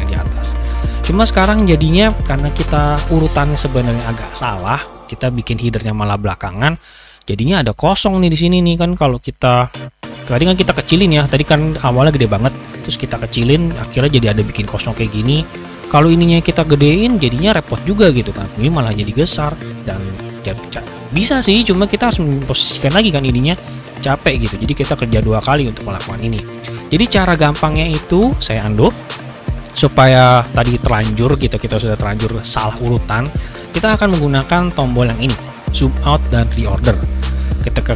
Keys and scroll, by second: 20.8 ctrl+c, 27.6 ctrl+z.